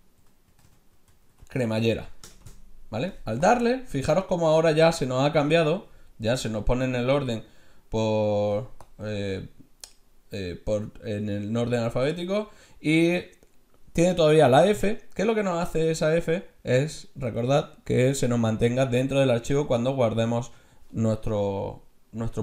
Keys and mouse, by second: 0.6 l, 3.4-8.2 drag.